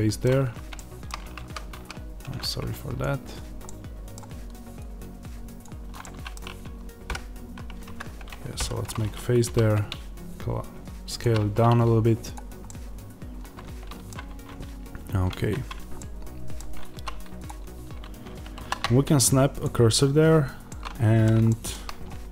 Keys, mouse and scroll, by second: 1.3 ctrl+z, 2.9 click, 3.5-5.5 middle drag, 5.5 click, 5.9-11.1 middle drag, 7.0 g, 7.9 Escape, 8.5 f, 11.1 click, 11.6 scroll down 1, 12.2 click, 12.5-17.4 middle drag, 14.2 Tab, 16.8 3, 17.4 click, 19.5 shift+s, 20.1-20.6 scroll up 1, 20.6-22.3 middle drag.